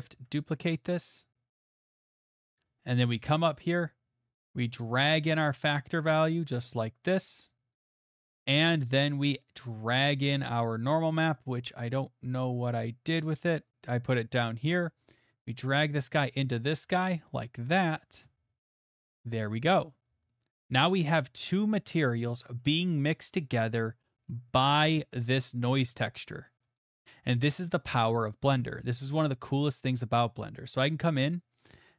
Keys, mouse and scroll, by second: 0.0 middle click, 0.3 shift+d, 1.9 click, 2.8 middle click, 3.3 middle click, 7.4 click, 8.0 middle click, 8.6 middle click, 9.8 middle click, 10.3 middle click, 11.6 middle click, 12.4 middle click, 13.2 middle click, 13.8-15.0 scroll, 16.1 click, 16.6 scroll, 16.8 middle click, 16.8 middle click, 16.8 middle click, 17.3 scroll, 18.0 scroll, 19.0 click, 19.2 scroll, 19.9 scroll, 21.3 middle click, 22.0 middle click, 22.6 middle click, 23.4 middle click, 23.7 middle click, 24.0 middle click, 24.3 middle click, 26.6 click, 26.9 middle click, 31.5 click.